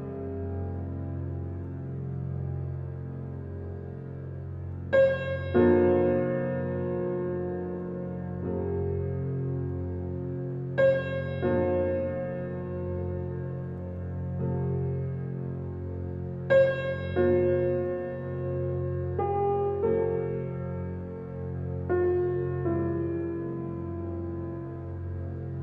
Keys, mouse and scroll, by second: 0.1 e, 1.3 e, 1.8 e, 2.5 shift+middle click, 3.0 e, 3.7 e, 5.3 e, 6.1 shift+middle click, 6.8 e, 7.8 e, 9.1 e, 9.6 e, 10.1 e, 10.6 e, 11.7-14.9 typing, 16.1 scroll down 2, 16.4-18.0 middle drag, 18.7 ctrl+z, 18.9 ctrl+z, 19.3 click, 20.0 e, 21.1 e, 22.5 alt+middle click, 23.4 shift+middle click, 23.6-24.1 scroll up 1, 24.1 click, 24.6 g.